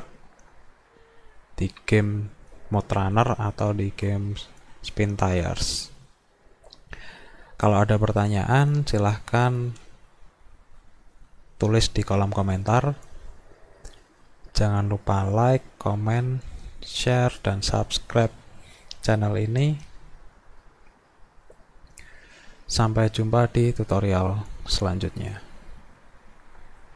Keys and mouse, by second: 26.8 click.